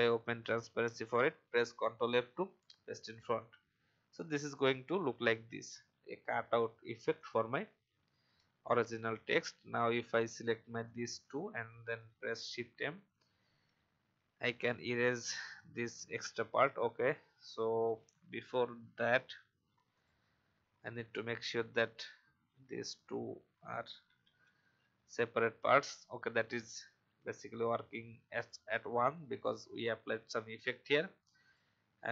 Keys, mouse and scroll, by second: 1.8 ctrl+f, 3.2 click, 8.4-8.9 alt+scroll down 1, 9.2 alt+scroll up 1, 10.8 shift+click, 12.3 shift+m, 13.1 alt+scroll up 1, 16.5-16.9 alt+scroll down 1, 17.5 alt+v, 18.0 alt+scroll down 1, 19.0 click, 21.6 alt+scroll up 1, 22.8 shift+click, 24.0 shift+m, 26.2 alt+scroll down 1, 27.7 alt+v, 28.3 click.